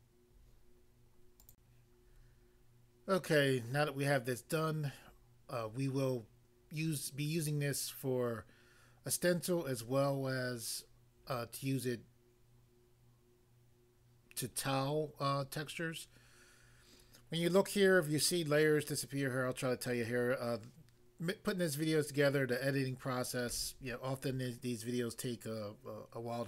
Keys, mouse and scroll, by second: 1.5 click.